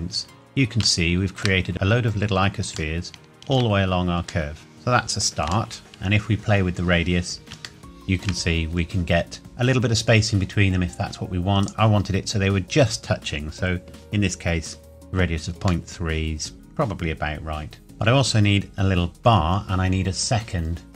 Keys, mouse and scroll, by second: 0.1-0.8 scroll down 1, 1.0 shift+middle click, 1.5 scroll down 1, 2.9 shift+middle click, 3.6-4.5 scroll down 1, 4.5 middle click, 5.7 shift+middle click, 5.9 click, 6.9-7.5 scroll up 1, 7.8 shift+middle click, 8.5-10.2 scroll up 1, 11.6 click, 15.9 middle click.